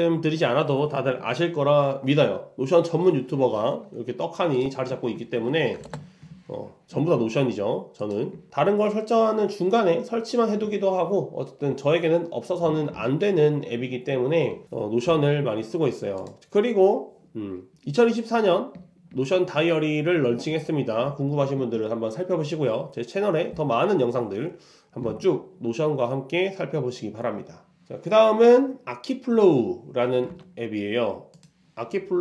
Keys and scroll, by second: 4.9 super+w, 5.4 super+1, 5.9 ctrl+alt+Return.